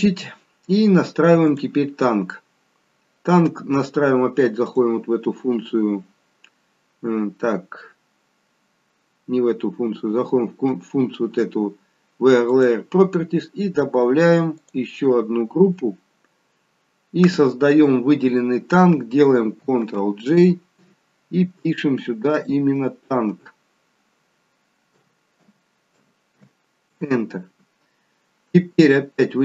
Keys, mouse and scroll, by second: 1.5 click, 2.4-3.4 scroll down 3, 4.6 click, 12.5 click, 14.6 click, 19.8 ctrl+g, 22.3 click, 29.2-29.4 scroll down 2.